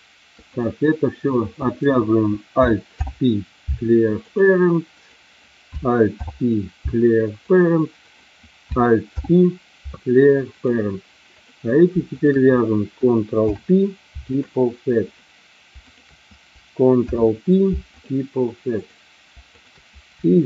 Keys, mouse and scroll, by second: 2.9 alt+p, 6.1 alt+p, 8.0 click, 9.1 alt+p, 11.2 click, 13.4 ctrl+p, 15.1 click, 15.9 shift+click, 17.0 ctrl+p, 18.7 click, 19.5 shift+click.